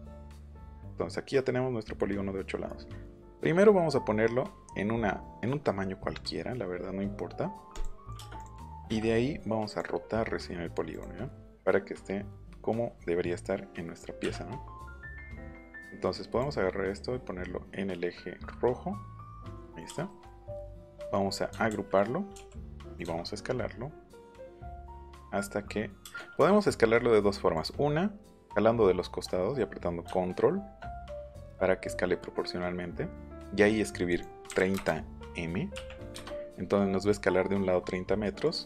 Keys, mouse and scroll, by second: 7.7 click, 8.3 click, 8.5 click, 9.6 click, 10.9 click, 15.1 click, 16.3 click, 19.3 click, 19.6 middle click, 21.6 ctrl+g, 22.8 click, 27.5 click, 34.1 click, 34.5 KP_3, 34.7 KP_0, 35.7 m, 38.4 click.